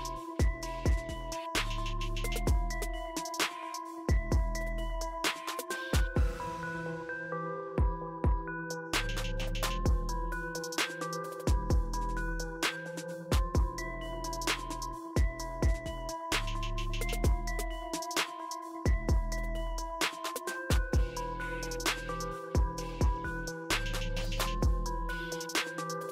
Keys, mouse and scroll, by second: 0.7-1.2 scroll up 1, 2.0 ctrl+click, 3.0 right click, 4.9 click, 11.2 click, 15.7 right click, 16.9 click, 18.0-19.4 scroll up 1, 23.3 click, 25.7 click.